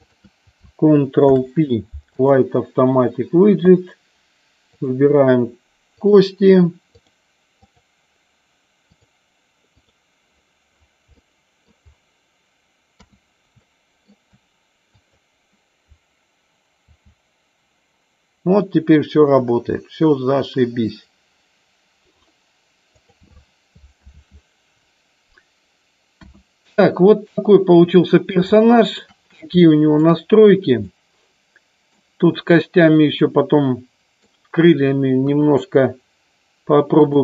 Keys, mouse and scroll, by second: 1.4 ctrl+p, 4.9 click, 6.0 click, 7.0 click, 7.9 click, 8.9-10.0 drag, 11.4 middle click, 13.0 KP_3, 13.7 shift+middle click, 15.1 click, 17.0 r, 23.2 click, 24.3 ctrl+z, 26.3 KP_1, 27.4 middle click, 28.8 shift+middle click, 29.6 shift+middle click, 30.9-32.0 middle drag, 33.4 middle click, 35.3 KP_1, 37.1 click.